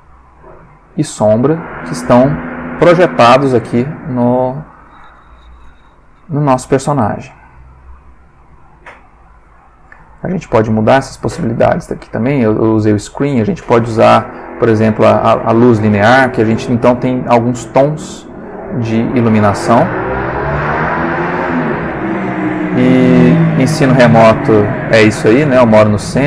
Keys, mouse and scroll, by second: 10.2-14.7 drag, 17.2 click, 18.3 click, 19.3 click, 20.8 click, 21.9 click, 24.1-24.8 drag.